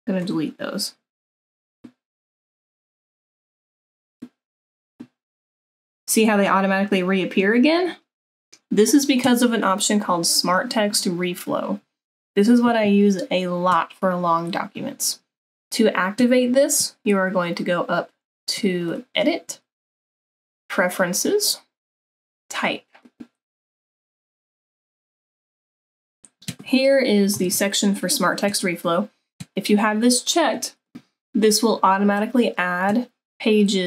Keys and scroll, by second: 27.5 super+=.